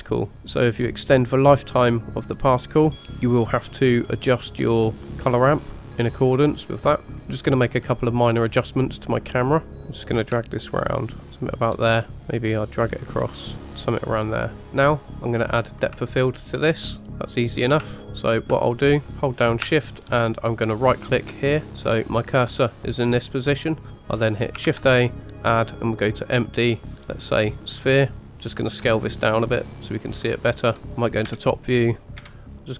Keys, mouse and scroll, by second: 4.1 click, 7.1 scroll down 2, 7.2 shift+middle click, 8.9 click, 10.4-11.6 shift+drag, 12.1-14.6 shift+drag, 14.6 shift+middle click, 15.1 click, 16.2 shift+middle drag, 17.0-17.4 middle drag, 17.6 scroll down 2, 18.0 shift+middle click, 18.0 scroll up 2, 18.7-19.0 shift+middle drag, 20.9 shift+right click, 21.6 middle click, 22.8-23.7 middle drag, 23.9 shift+a, 24.7 shift+a, 28.9 s, 30.8 s, 31.3 KP_7, 32.2 KP_Decimal.